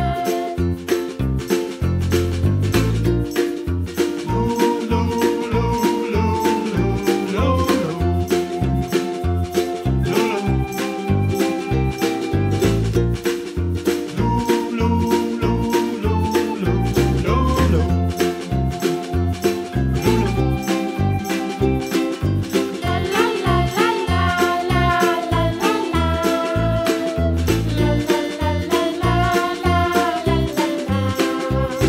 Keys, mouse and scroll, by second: 0.1 Tab, 0.6 click, 0.9 click, 1.1 scroll down 3, 1.2-1.7 middle drag, 1.7 g, 3.2 KP_Decimal, 3.4-3.8 scroll down 1, 3.8 g, 4.5-5.1 middle drag, 5.1 scroll down 1, 5.2-6.4 middle drag, 6.7-8.1 scroll down 11, 9.9 g, 11.0-12.0 middle drag, 12.0 r, 13.2-14.0 middle drag, 14.0 s, 14.9 g, 17.3 KP_Decimal, 17.6-18.5 middle drag, 18.5-18.8 scroll down 4, 18.8-20.0 middle drag, 20.3 g, 21.5 g, 22.5 r, 24.0 scroll down 2, 24.1 middle click, 24.8 click, 25.0-25.3 scroll down 1, 25.3-26.5 middle drag, 27.0 click, 27.2 shift+click, 27.7 shift+click, 28.0 shift+click, 28.5 shift+drag, 28.8 shift+click, 28.9 shift+click, 29.1 shift+click, 29.4 shift+drag, 29.7 shift+click, 29.9 shift+click, 30.2 shift+click, 30.4 shift+click, 31.1 shift+d.